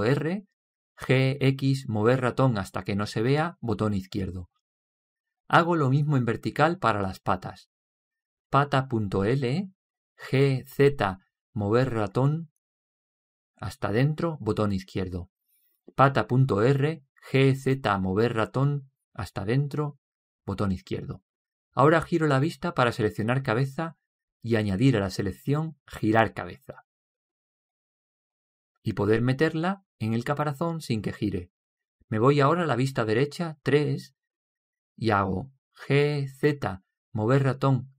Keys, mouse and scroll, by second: 0.5 right click, 2.4 g, 9.3 right click, 10.8 g, 16.7 right click, 18.0 g, 23.1-24.2 middle drag, 25.8-29.6 right drag, 31.1 right click, 34.8 KP_3, 36.9 g.